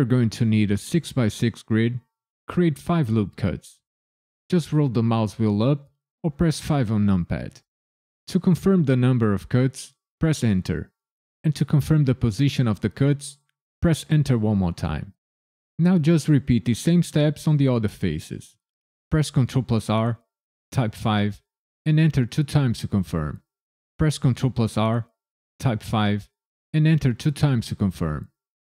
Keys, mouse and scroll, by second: 6.7 KP_5, 10.2 KP_Enter, 13.8 KP_Enter, 19.3 ctrl+r, 20.9 KP_5, 21.9 KP_Enter, 22.5 KP_Enter, 24.2 ctrl+r, 25.9 KP_5, 26.8 KP_Enter, 27.4 KP_Enter.